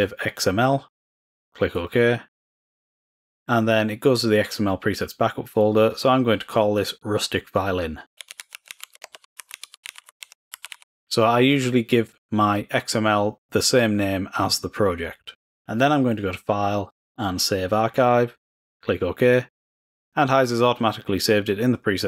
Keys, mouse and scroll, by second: 1.7 click, 5.4 click, 15.1 click, 16.8-18.6 drag, 19.3 click.